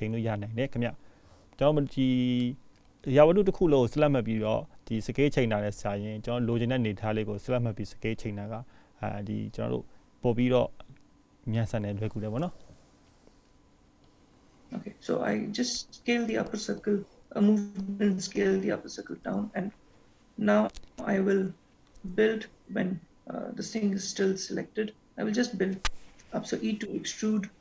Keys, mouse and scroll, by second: 5.5 s, 19.3-22.7 scroll up 1, 23.1-24.0 scroll up 5, 25.5 e.